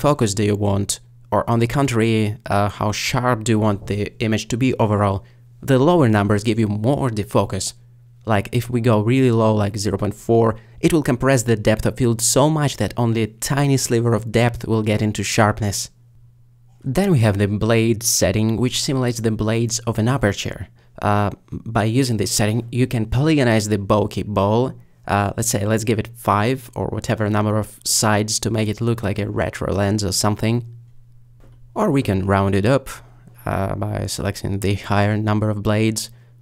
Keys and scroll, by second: 26.1 5, 32.4 typing, 35.7 3.